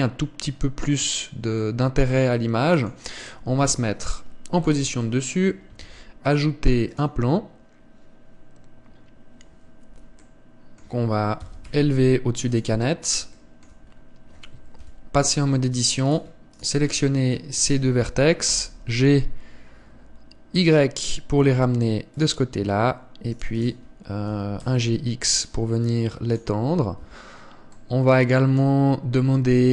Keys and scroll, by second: 1.6 Escape, 4.4 KP_7, 6.6 shift+a, 12.2 g, 15.6 KP_7, 16.2 Tab, 19.3 g, 25.1 g, 27.8 Tab.